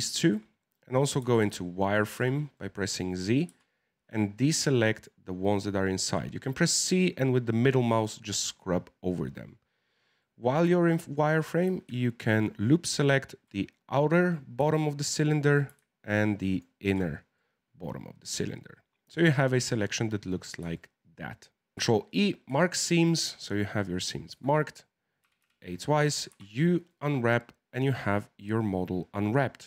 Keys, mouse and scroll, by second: 1.2 z, 1.5 shift+middle click, 2.1 z, 2.5 middle click, 3.4 c, 6.0 c, 8.4 middle click, 9.3-10.2 scroll up 3, 10.2-12.2 middle drag, 12.2 alt+shift+right click, 13.5-16.4 middle drag, 16.4 alt+shift+right click, 17.0 scroll down 4, 17.3-19.1 middle drag, 19.1-19.5 scroll down 4, 19.5-21.7 middle drag, 21.7 ctrl+e, 22.5-24.3 shift+middle drag, 24.3 z, 25.2 a, 25.4 a, 26.3 u, 29.5 click.